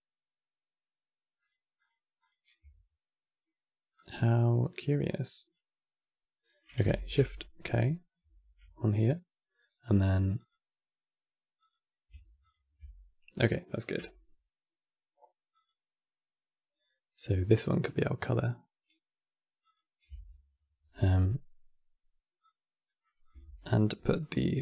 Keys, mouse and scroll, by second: 1.6 ctrl+shift+click, 3.6-6.7 drag, 7.9 shift+k, 10.1 click, 11.3 click, 12.2 ctrl+shift+click, 15.3 click, 16.9-18.2 middle drag, 18.2 ctrl+shift+click, 19.4 ctrl+shift+click, 22.1 click, 23.2 shift+d, 23.9-24.6 drag.